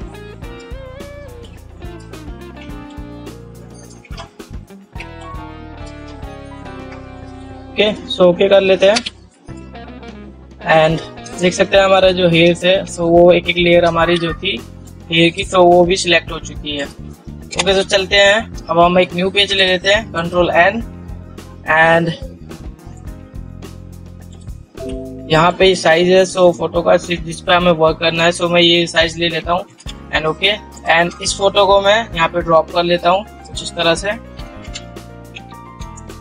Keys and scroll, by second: 9.3 ctrl+0, 12.3 ctrl+0, 12.8 ctrl++, 17.9 ctrl+0, 20.4 ctrl+n, 30.1 ctrl+0, 34.8 ctrl+t, 35.0 ctrl+0.